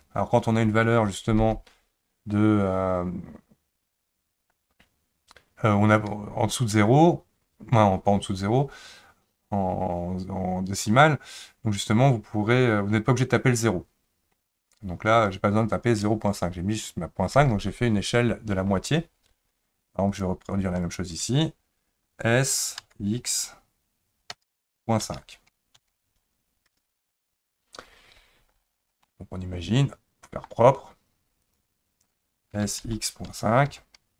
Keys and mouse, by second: 20.8 shift+click, 22.8 s, 29.0-30.5 middle drag, 31.4 click, 32.5 s.